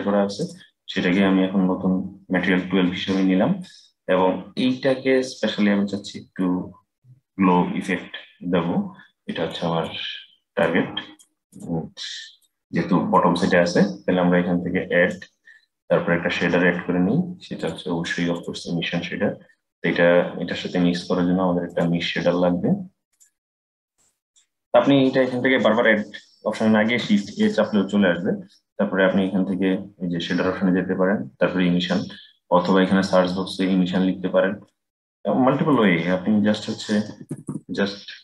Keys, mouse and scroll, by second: 0.1-3.1 drag, 5.1-8.1 middle drag, 9.2-11.3 drag, 12.1 click, 14.7-17.9 drag, 21.4-22.9 drag, 23.5-26.7 drag, 26.9 shift+a.